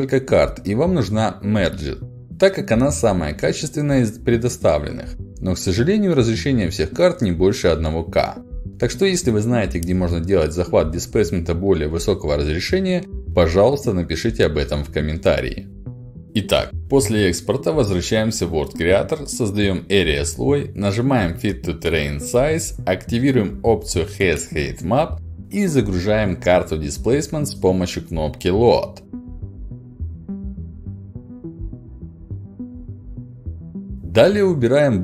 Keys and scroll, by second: 0.1 ctrl+c, 3.7 ctrl+c, 24.7 ctrl+alt+d, 28.1 ctrl+alt+d, 30.1 ctrl+v, 30.5 Return.